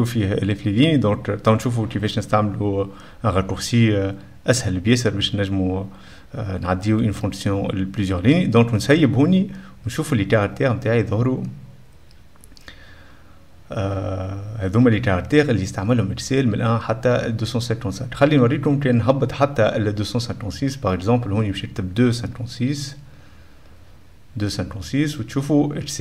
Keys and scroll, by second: 21.6 F2, 21.7-23.9 typing.